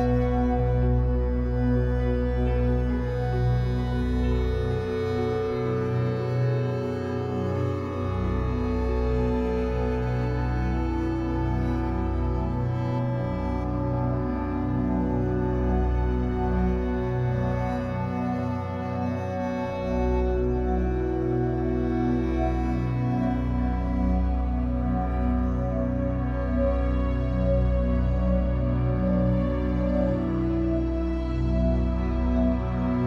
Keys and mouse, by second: 6.1 7, 7.1 drag, 8.5-10.4 drag, 11.2 click, 13.6 click, 14.6-15.1 typing, 15.5 Return, 16.9 s, 17.7 click, 18.6 s, 19.1 click, 20.0 s, 20.4 click, 20.9 alt+click, 21.7 alt+click, 22.3 ctrl+alt+click, 23.2 alt+click, 23.2 typing, 24.2 alt+click, 24.8 alt+shift+click, 25.9 alt+click, 27.0 alt+click, 29.7-30.4 typing, 29.9 click, 30.8 click, 31.5 click, 32.4 typing.